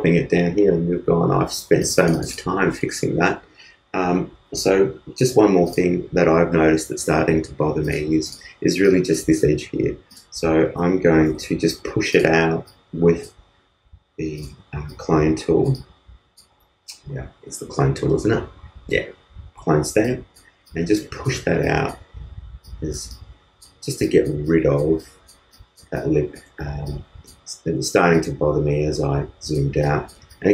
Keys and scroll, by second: 11.8 alt+Page_Up, 27.8 super+z.